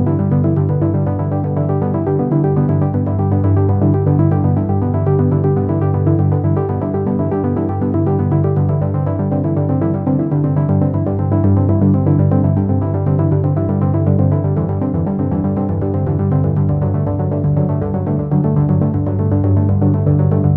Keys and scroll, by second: 0.9 ctrl+alt+z.